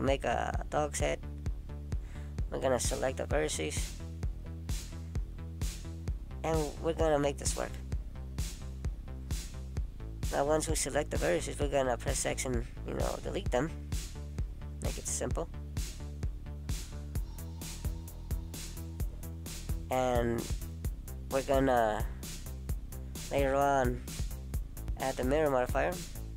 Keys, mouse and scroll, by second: 0.3 middle click, 3.2 click, 3.8 click, 4.7 middle click, 5.6 shift+click, 6.8 shift+click, 8.4 shift+click, 8.7 middle click, 10.8 shift+click, 11.4 shift+click, 12.4 shift+click, 12.5 middle click, 15.1 shift+click, 16.0 middle click, 18.7 right click, 23.0 middle click, 25.4 click, 25.9 middle click.